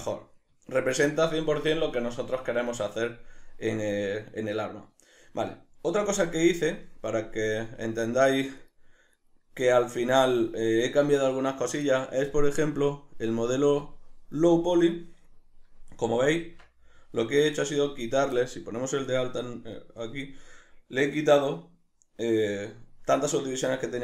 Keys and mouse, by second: 6.0 z, 8.6 right click, 9.1 right click, 9.6 right click, 10.6 right click, 13.3 click, 13.8 drag, 14.8 right click, 16.4 Tab, 19.1 click.